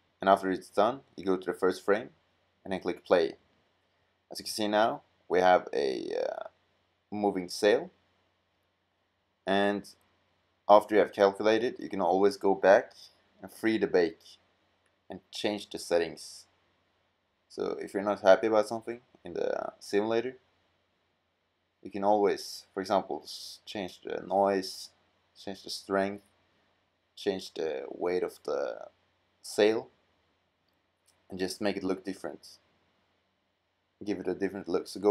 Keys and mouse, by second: 3.0 middle click, 14.6-16.2 drag, 17.7 click, 32.3-35.0 middle drag.